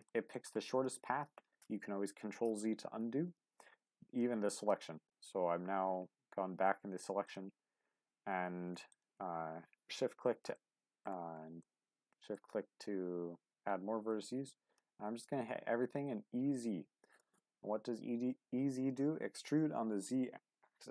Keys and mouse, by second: 0.1 shift+middle click, 4.7 ctrl+z, 7.2 ctrl+click, 10.5 middle click, 11.6 middle click, 14.5 z, 16.5 click.